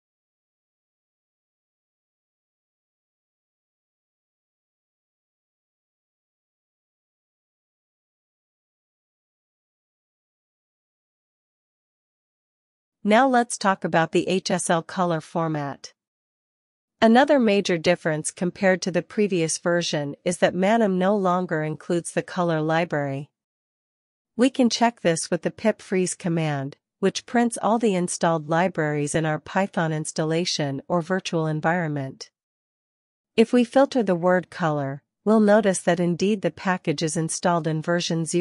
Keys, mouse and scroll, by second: 1.3 ctrl+b, 1.5-3.0 typing, 3.9 Escape, 4.1-4.6 typing, 5.4 alt+f, 5.8 Up, 6.7 BackSpace, 6.8 BackSpace, 7.3 Return, 12.6 click, 13.0 click, 17.1 Return, 18.2-18.7 typing, 20.4-21.1 typing, 22.5-26.7 typing, 25.8 alt+shift+f, 28.8 Return, 33.0 ctrl+l, 33.3 Up, 33.9-35.1 typing, 35.2 Return.